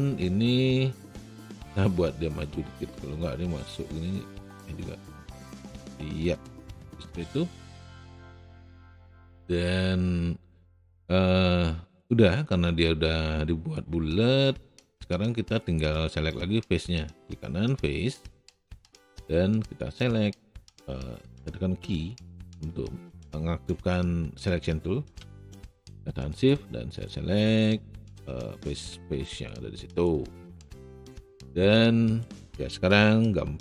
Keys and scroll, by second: 0.0 w, 5.5 e, 21.9 q.